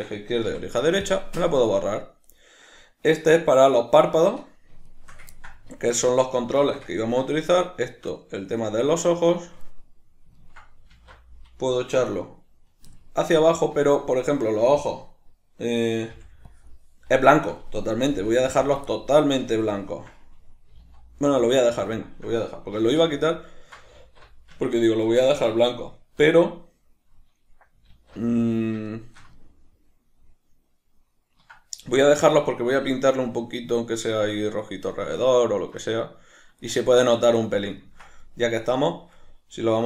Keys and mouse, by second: 0.5 x, 2.3 right click, 4.9 shift+right click, 5.4-7.5 ctrl+middle drag, 5.7 alt+q, 7.5 shift+right click, 8.2-9.3 middle drag, 9.3 shift+right click, 9.7-10.9 middle drag, 10.9 alt+q, 13.0-16.1 ctrl+middle drag, 16.1 b, 18.7 click, 18.9-22.1 ctrl+middle drag, 20.7 g, 22.1 shift+click, 22.8 alt+q, 23.5-39.8 ctrl+middle drag, 24.0 alt+q, 27.9 alt+q.